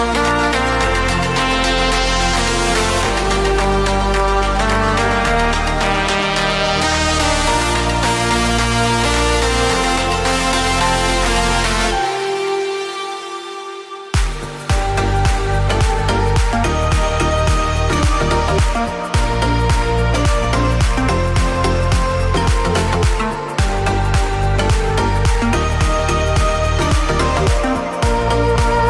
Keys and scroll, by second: 1.0 BackSpace, 1.2 Delete, 2.2 ctrl+s, 16.5 Return, 22.3 ctrl+v, 25.0 ctrl+c, 26.6 ctrl+v, 27.8 F5.